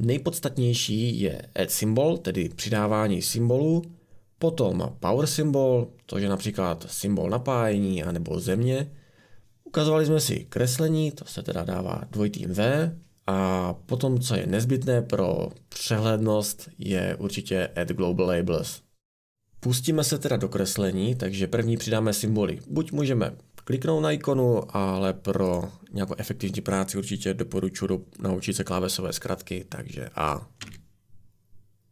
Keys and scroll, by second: 30.7 a.